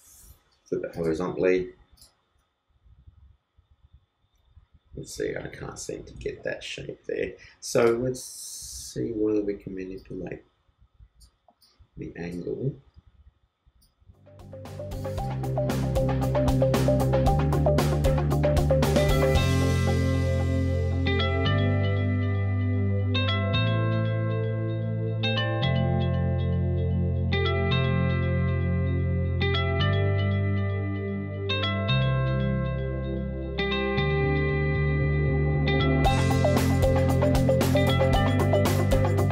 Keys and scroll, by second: 6.1 super+z, 25.3 shift+super+i, 26.2 super+d, 27.2 super+t, 27.2 super+space, 36.7 super+space, 37.4 super+t.